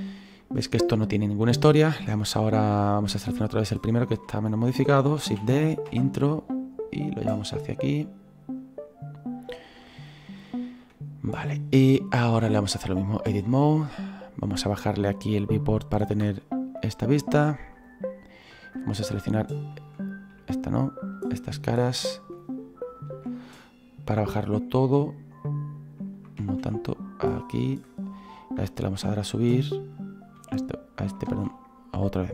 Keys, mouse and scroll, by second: 0.4 shift+middle click, 0.8-1.4 scroll down 2, 1.4-2.5 scroll up 2, 2.5-3.8 scroll up 1, 3.8-5.3 right drag, 5.3 shift+d, 7.1-10.4 drag, 10.4-14.0 shift+middle drag, 14.0-16.4 drag, 16.4-16.7 scroll up 1, 16.7-18.6 middle drag, 18.6-21.7 shift+right drag, 21.9-24.6 shift+right drag, 24.6-26.4 drag, 26.4 ctrl+z, 27.3 click, 28.1 right click, 28.9 e, 29.9 right click, 30.4 e.